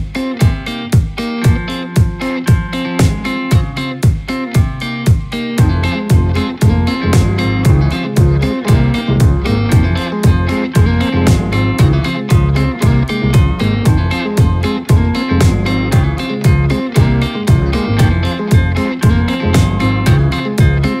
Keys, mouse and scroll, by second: 2.4-6.3 drag, 8.6 click, 11.2 click, 13.0-13.5 drag, 13.9-14.6 middle drag, 14.6 scroll up 1, 14.8-16.3 shift+middle drag, 16.3 scroll up 1, 16.4 scroll down 1, 16.6-17.6 middle drag, 17.6-19.4 scroll up 1, 19.4-20.3 scroll up 1, 20.3-21.0 scroll up 2.